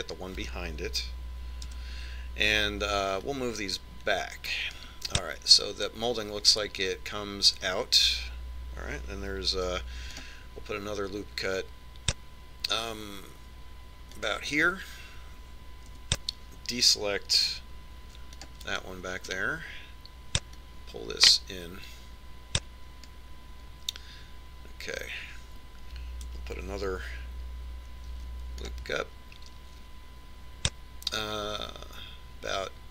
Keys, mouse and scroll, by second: 1.1-2.9 middle drag, 3.4 KP_3, 5.1 click, 11.4 ctrl+r, 17.8 c, 21.3 right click, 22.5 click, 30.1 ctrl+r.